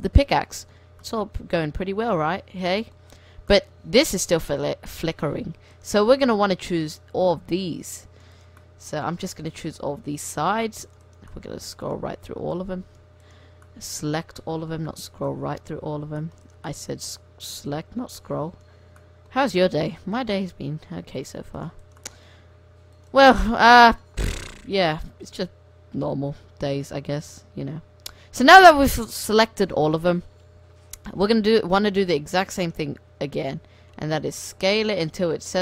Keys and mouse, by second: 3.9 Tab, 4.6-7.6 right drag, 6.4 c, 8.5 middle click, 8.7-10.3 right drag, 9.2 c, 11.2-13.1 right drag, 12.1 c, 13.4-15.4 right drag, 14.1 c, 16.6-18.6 right drag, 17.1 c, 19.6-20.6 middle drag, 20.6-21.6 right drag, 20.7 c, 21.9-25.0 right drag, 22.6 c, 24.8 c, 27.7-30.2 middle drag, 31.5-35.5 middle drag, 32.2 c, 33.4 s.